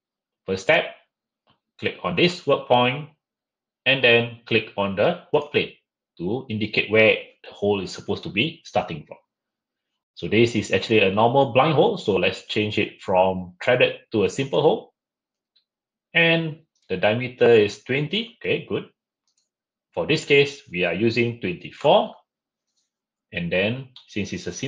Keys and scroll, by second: 21.9 typing.